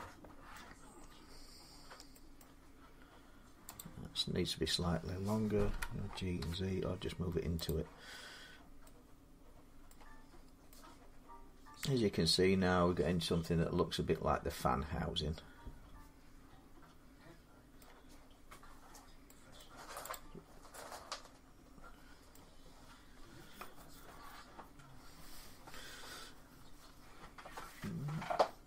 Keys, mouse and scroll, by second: 0.3 middle click, 0.6 scroll down 2, 1.2-1.9 scroll up 7, 2.2 scroll, 3.6 click, 5.5-6.2 typing, 5.8 middle click, 7.5 click, 7.8 g, 7.9-8.6 scroll down 8, 9.7 middle click, 10.2 scroll up 1, 10.2 scroll down 2, 10.2 z, 13.2 middle click, 13.2 scroll up 7, 17.6 middle click, 18.0 scroll, 18.1 scroll up 4, 18.6-19.1 scroll down 3, 19.4 middle click, 19.9 click, 21.4 scroll up 1, 22.1 middle click.